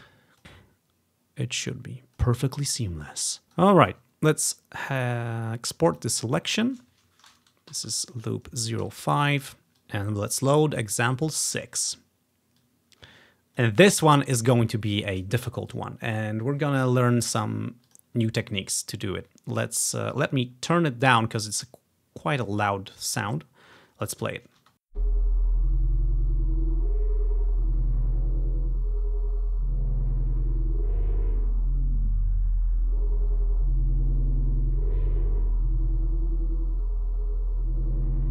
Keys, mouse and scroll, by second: 0.7-7.7 drag, 7.7 typing, 7.8 click, 8.9-9.5 Return, 9.7 click, 12.7-13.7 drag, 18.0 click, 20.3-23.5 drag, 24.7 space.